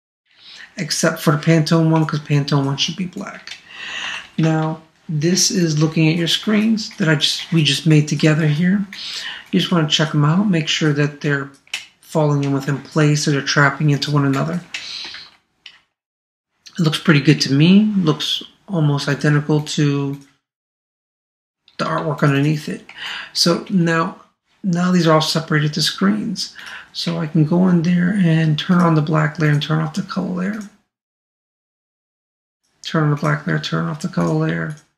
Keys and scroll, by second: 4.0 super+-, 6.9 super+space, 15.1 super+0, 22.0 super+space.